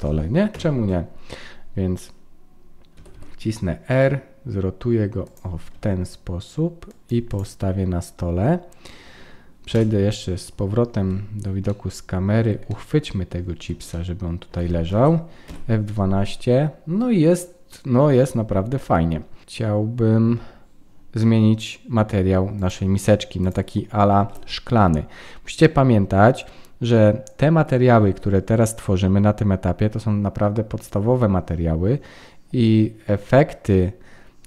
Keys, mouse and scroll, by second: 0.5 KP_1, 1.4-2.0 scroll up 1, 2.0-2.9 scroll up 1, 2.9 r, 5.7 g, 7.3 click, 9.7 KP_0, 11.7 shift+middle click, 11.7-12.4 scroll down 1, 12.7 middle click, 13.9 shift+middle click, 14.9 ctrl+s, 15.6 F12, 23.4 click, 24.2 ctrl+s.